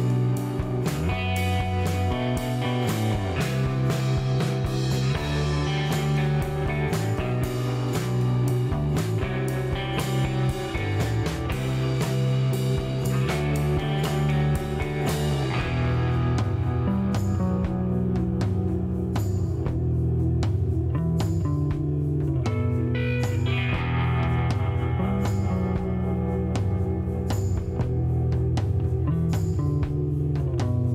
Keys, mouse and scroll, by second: 0.2 click, 1.9 click, 4.4 click, 5.5 click, 7.2-8.7 drag, 9.3 middle click, 12.2 click, 15.3 click, 18.5 click, 19.0 right click, 19.7 click, 21.7 click, 24.0 middle click, 24.8 scroll up 1, 26.5 click, 28.3 click.